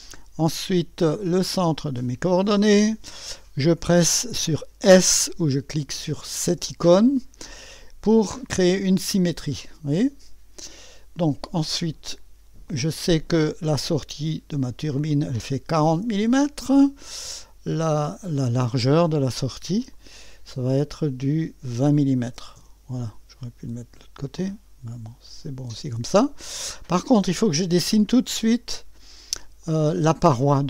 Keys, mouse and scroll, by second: 2.3 click, 6.4 s, 8.9-11.1 drag, 12.7 click, 14.6 click, 15.7 4, 16.0 0, 16.3 Return, 18.7 click, 19.9-21.2 drag, 21.9-22.8 typing, 23.9 typing, 25.0 click, 27.9 click, 29.6 click.